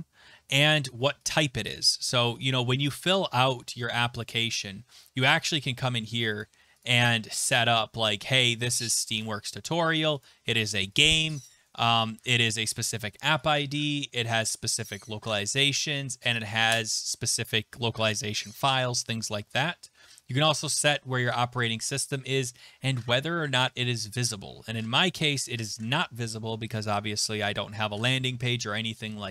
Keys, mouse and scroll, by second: 1.3 click, 2.4 click, 4.1-6.3 scroll, 6.4 click, 6.8 click, 8.7 click, 10.2 click, 11.0 click, 11.5 click, 13.5 click, 19.8 scroll.